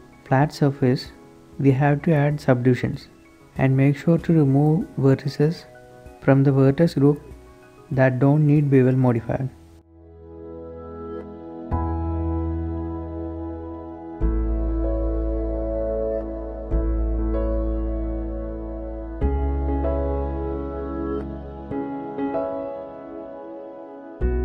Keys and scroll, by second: 4.6 shift+Escape, 8.9 Tab, 11.4 Tab, 11.6 Tab, 12.0 z, 12.6 b, 13.0 Tab, 13.4 Tab, 13.6 z, 20.1 shift+b, 20.6 b, 21.0 b.